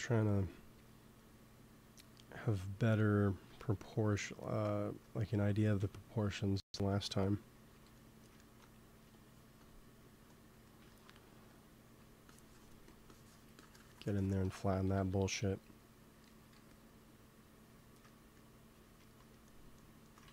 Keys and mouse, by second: 0.6 f, 1.2-3.1 drag, 6.5 KP_1, 6.7 KP_3, 9.5-11.4 drag, 11.0 f, 11.8 f, 12.2-13.7 drag, 12.7 f, 14.8 KP_2, 14.9 KP_3, 16.2 g, 16.4 f, 17.3-19.7 drag, 18.9 ctrl+s, 20.2 ctrl+z.